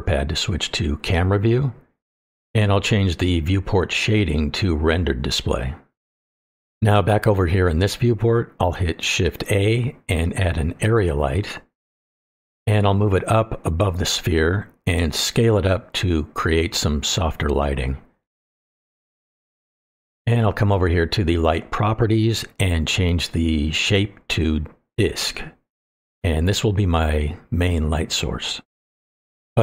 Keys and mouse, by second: 0.5 KP_0, 2.5 shift+middle drag, 9.5 shift+a, 13.3 click, 14.0-15.3 drag, 16.3 click, 16.5 middle click, 17.1-18.5 drag, 18.8-19.5 middle drag, 22.1 click, 24.6-25.9 drag, 27.8-29.6 middle drag.